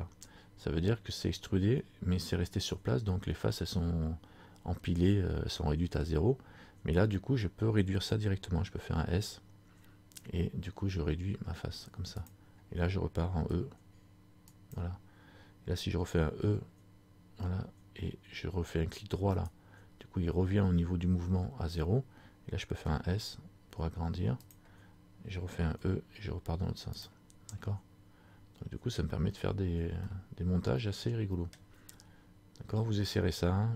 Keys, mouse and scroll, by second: 27.6 middle click, 29.4-30.2 scroll down 3, 30.2 middle click, 31.8 scroll down 1, 32.1-32.6 scroll up 4.